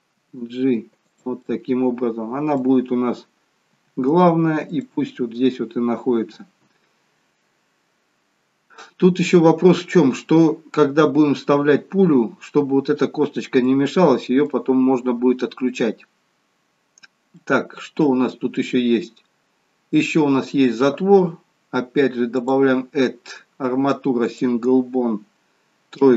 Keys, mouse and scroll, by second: 0.2 g, 1.4 middle click, 2.8-3.7 scroll up 3, 3.7 g, 6.5 scroll down 1, 13.6 middle click, 17.3 middle click, 22.3 click, 26.0 KP_3.